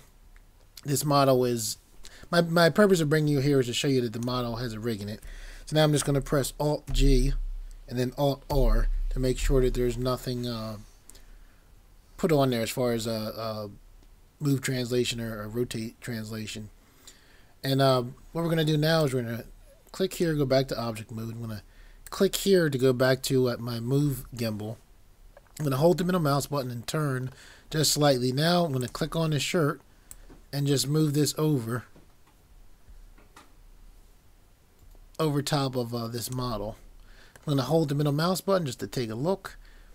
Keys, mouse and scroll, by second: 6.9 alt+g, 8.6 r, 19.0 click, 25.8 middle click, 28.8 click, 37.6 middle click.